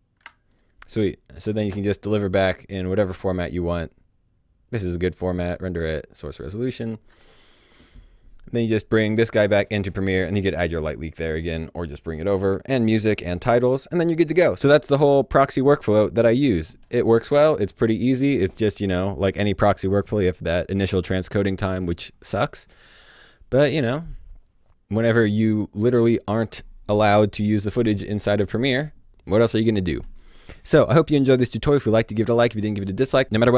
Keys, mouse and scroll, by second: 0.4 click, 5.5 click, 6.4-7.8 scroll down 1.